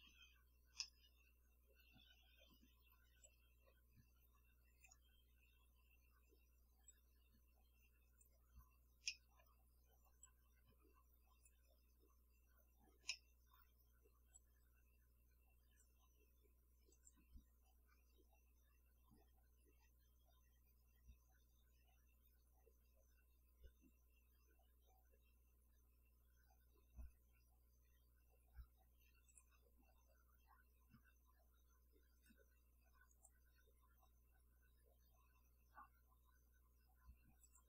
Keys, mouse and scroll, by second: 0.7 scroll up 1, 0.8-2.6 middle drag, 3.2-5.1 drag, 6.9-8.4 drag, 9.1-9.6 middle drag, 10.2-11.7 drag, 13.1 middle click, 14.3-16.0 drag, 16.9 click, 28.9 scroll up 1, 29.3 click, 32.2 click, 32.3 middle click, 33.1 click, 37.4 click.